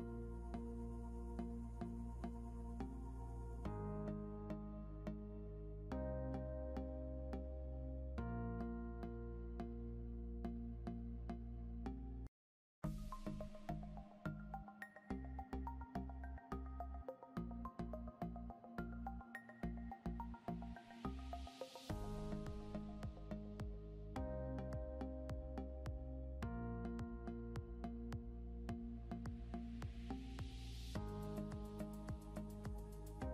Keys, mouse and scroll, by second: 12.6 scroll up 1, 13.2 click, 15.3 shift+click, 17.2 click, 31.9 ctrl+click, 33.0 scroll up 1.